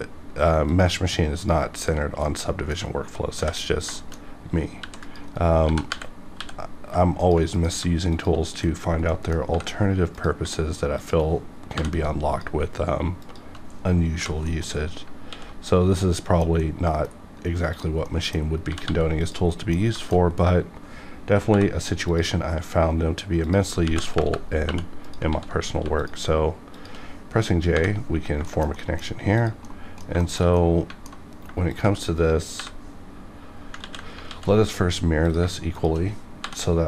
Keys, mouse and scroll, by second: 0.7 ctrl+click, 1.4 click, 1.8 shift+click, 2.2 middle click, 3.1 scroll up 1, 3.4 j, 3.7 scroll down 1, 4.0 shift+middle click, 4.8 ctrl+r, 5.0 ctrl+click, 5.3 right click, 5.6 g, 5.9 y, 6.3 x, 6.4 g, 7.2 ctrl+click, 7.5 click, 8.1 shift+click, 9.1 middle click, 9.5 j, 10.0 click, 11.0 shift+click, 11.8 j, 12.3 click, 12.5 click, 13.2 shift+click, 14.2 j, 14.5 middle click, 15.2 alt+x, 16.0 middle click, 16.6 middle click, 17.1 scroll up 1, 17.7 click, 18.1 middle click, 18.7 g, 18.8 g, 19.2 click, 19.5 middle click, 20.0 shift+middle click, 20.1 scroll up 1, 21.5 k, 22.0 click, 23.8 KP_Decimal, 24.2 KP_Enter, 24.7 2, 25.0 click, 25.3 ctrl+x, 25.7 1, 26.0 click, 26.7 shift+click, 27.7 shift+click, 28.2 scroll down 1, 28.5 shift+middle click, 28.9 middle click, 29.4 click, 29.6 middle click, 30.2 shift+middle click, 30.4 shift+scroll down 1, 30.6-32.0 middle drag, 31.7 shift+click, 32.6 j, 33.8 ctrl+z, 34.3 x, 35.3 click, 35.7 shift+click, 36.4 j.